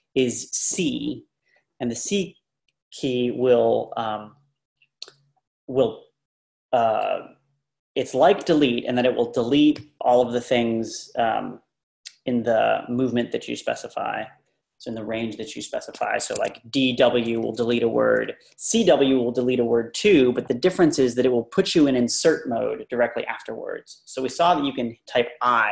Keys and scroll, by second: 16.4 ⟲, 16.6 Up, 16.8 Up, 16.9 Up, 17.2 Left, 17.4 Left, 17.6 Left, 17.8 Left.